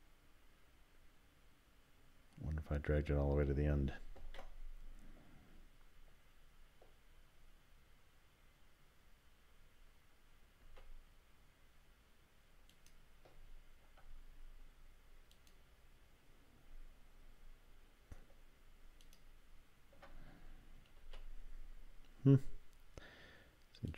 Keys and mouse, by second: 4.2 ctrl+z, 10.6 s, 12.7 click, 15.3 alt+click, 19.0 alt+click, 21.0 s.